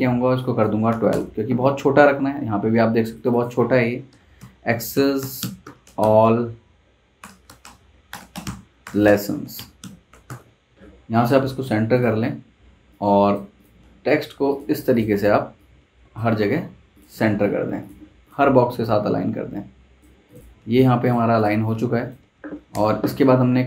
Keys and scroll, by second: 0.5-1.4 typing, 4.1-10.7 typing, 22.3 super+z, 22.7 super+Tab.